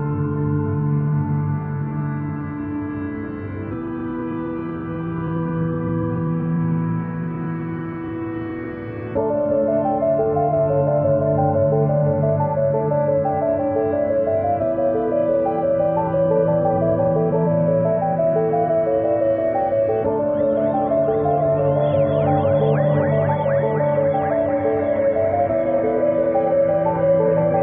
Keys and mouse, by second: 1.9 ctrl+z, 3.0 click, 3.1 click, 4.2 shift+click, 5.1 typing, 5.2 ctrl+g, 6.4 ctrl+g, 6.4 typing, 8.6 click, 10.0 ctrl+z, 11.2 click, 11.2 typing, 12.2 ctrl+z, 13.0 ctrl+z, 13.7 typing, 13.8 ctrl+alt+z, 15.6 ctrl+click, 16.9 ctrl+click, 17.9 ctrl+c, 18.4 ctrl+f, 19.6-21.4 shift+drag, 21.5 shift+click, 22.7 shift+click, 22.8 ctrl+g, 24.1 ctrl+g, 24.8 alt+shift+click, 25.9-27.6 drag.